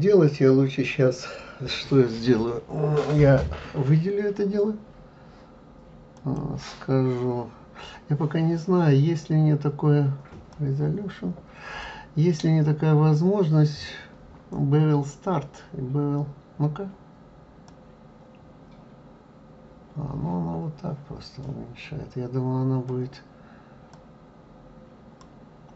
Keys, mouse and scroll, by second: 0.2-1.1 scroll up 2, 6.2 click, 9.6 scroll down 1, 10.5-13.6 drag, 17.7-20.7 drag, 24.0-25.7 drag.